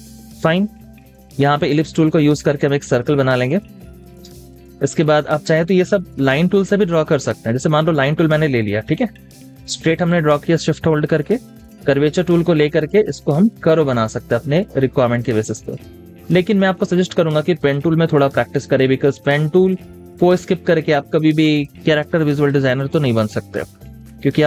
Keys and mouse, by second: 2.3 shift+click, 4.2 space, 4.5 double click, 4.7 space, 23.3 space.